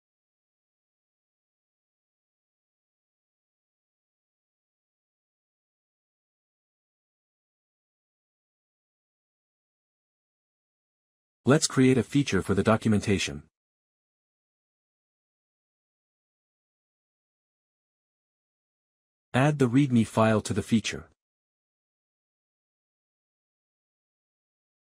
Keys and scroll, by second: 13.4 Return, 14.2-19.1 typing, 16.4 Left, 16.7 Left, 16.9 Right, 17.1 Left, 19.6 ctrl+s, 21.9 Left, 22.1 Return, 22.4 Right, 22.5 Up, 22.6 Right, 22.7-24.9 typing.